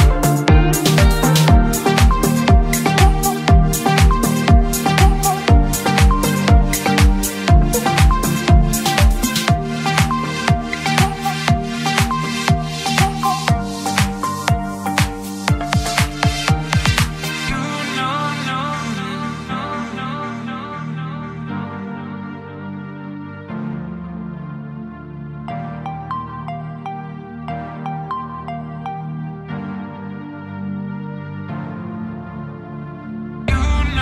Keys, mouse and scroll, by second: 1.9-3.0 drag, 3.6 click, 4.2 click, 6.1 click, 8.1 click, 9.1 click, 10.3 click, 12.7 click, 13.5-14.8 drag, 15.3 click, 20.9-27.1 middle drag, 30.2 click, 31.2 click, 31.9 click, 32.7 click.